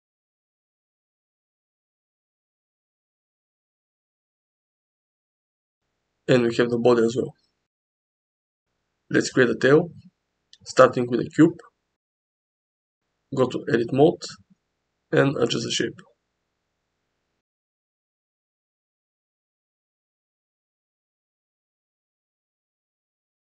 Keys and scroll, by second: 0.8 Tab, 3.1 Tab, 4.0 g, 4.5 x, 5.1 Tab, 8.6 g, 9.9 shift+a, 11.5 s, 14.0 Tab, 14.9 g, 17.1 g, 18.9 g.